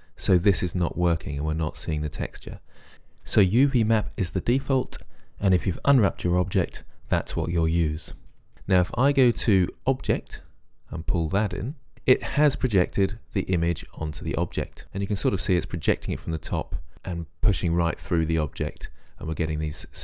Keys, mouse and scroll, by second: 10.5-11.9 right drag.